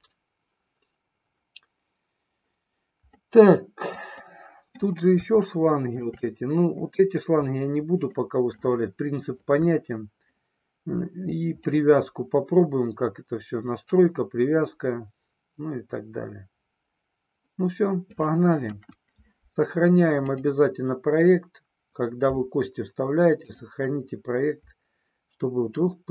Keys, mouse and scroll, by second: 3.1-4.1 middle drag, 4.3 middle click, 5.4 shift+middle click, 8.2 middle click, 11.7-18.3 middle drag, 18.7 KP_1, 20.3-23.9 drag.